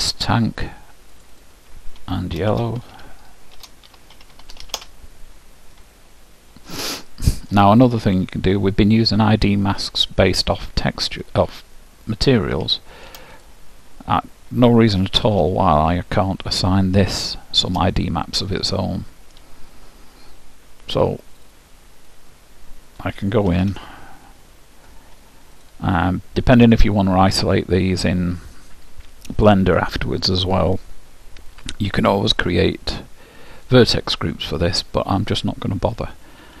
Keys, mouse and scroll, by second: 1.3-3.4 drag, 4.5 l, 6.3-10.1 middle drag, 10.3-12.2 drag, 12.2-13.5 middle drag, 13.5-15.3 drag, 15.3 shift+h, 16.1-20.0 middle drag, 23.6 Tab, 25.7-27.7 drag, 33.7-36.6 drag.